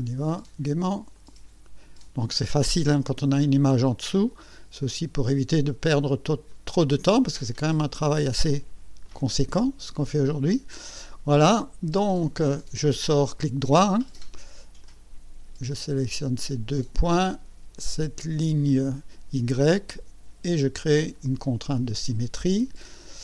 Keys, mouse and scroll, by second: 1.1 click, 3.4 click, 6.5 click, 9.0 click, 10.7 right click, 12.1 right click, 14.8 click, 16.7 click, 18.7 click, 21.1 click, 23.0 click.